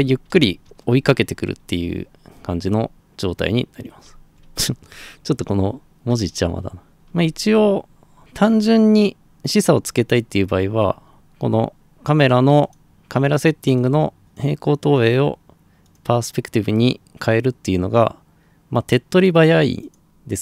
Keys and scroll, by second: 0.0-4.9 typing, 6.1-7.5 typing.